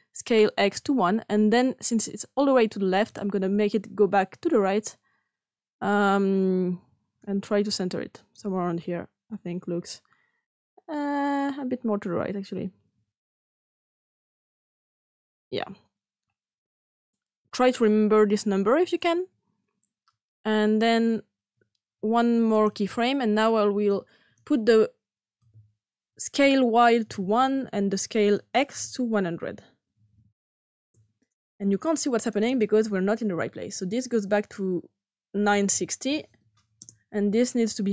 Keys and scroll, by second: 27.0 shift+1, 29.6-31.0 typing, 30.7 Return, 35.1-36.0 typing, 36.8 Return.